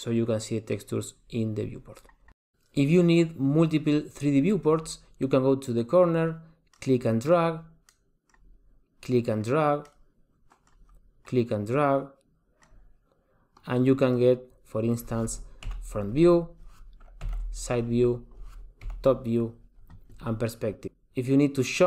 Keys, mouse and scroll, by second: 6.8 click.